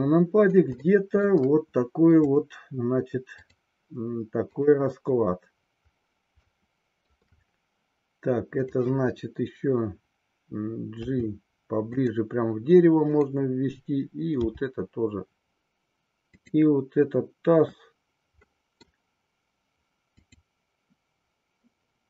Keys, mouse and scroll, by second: 1.0 shift+middle click, 2.3 click, 3.4-5.5 drag, 6.5-7.1 shift+middle drag, 11.0 g, 12.0 click, 14.5 g, 16.2 click, 18.4 middle click, 20.1 click.